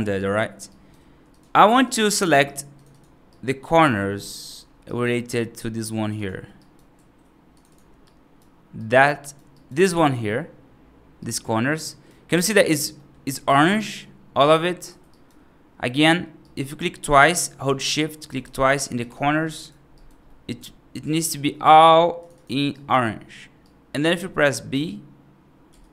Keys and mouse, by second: 0.6 right click, 1.1 click, 1.7 click, 2.1 2, 2.6 click, 2.8 click, 3.2 right click, 3.5 click, 3.6 click, 4.3 shift+click, 4.7 right click, 5.7 shift+click, 6.0 shift+click, 6.5 right click, 7.5 shift+click, 7.9 right click, 8.6 right click, 9.4 right click, 11.0 right click, 11.7 right click, 12.8 middle click, 13.2 right click, 15.0 right click, 15.8 click, 16.3 right click, 17.1 click, 18.1 right click, 18.8 shift+click, 19.0 shift+click, 19.4 right click, 19.8 right click, 20.1 middle click, 20.9 shift+click, 21.0 shift+click, 22.0 shift+click, 22.2 shift+click, 22.6 right click, 23.5 right click, 24.6 b.